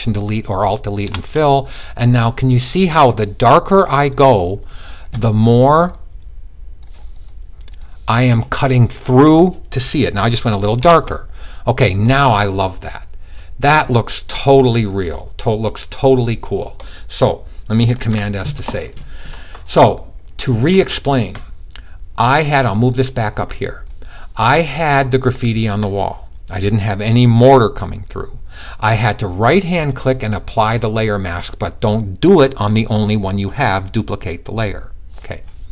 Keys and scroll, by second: 17.6 super+s.